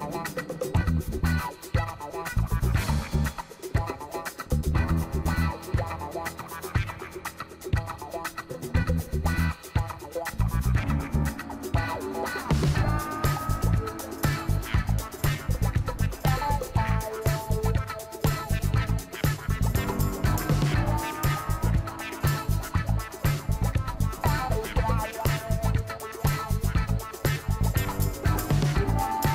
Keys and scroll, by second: 7.5 ctrl+t.